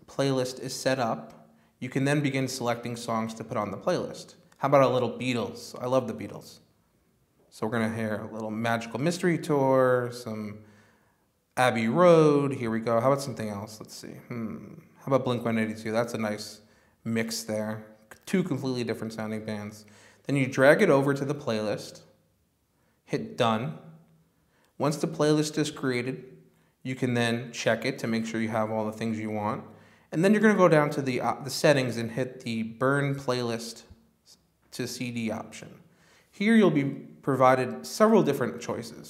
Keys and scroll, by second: 0.0-2.7 typing.